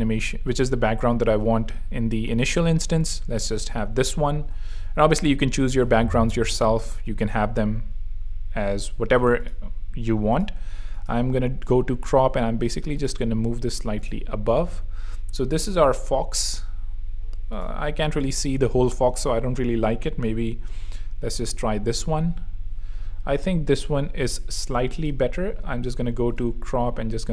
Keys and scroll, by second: 13.5 shift+Escape, 15.6 v.